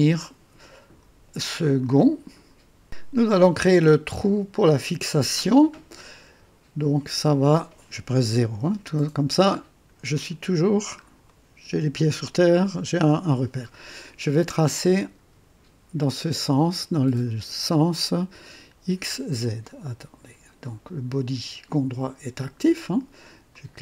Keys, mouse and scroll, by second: 0.7 right click, 1.5 click, 3.1 scroll up 2, 3.6-4.2 right drag, 5.4-5.7 scroll down 2, 8.2 KP_0, 8.9-9.5 right drag, 9.6 scroll down 2, 10.6-11.0 scroll down 1, 11.2-11.9 right drag, 23.5 click.